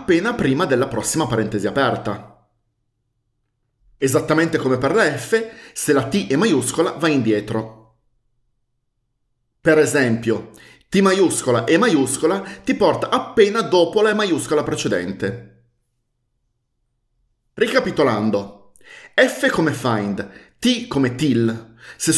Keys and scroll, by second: 11.3-11.9 typing.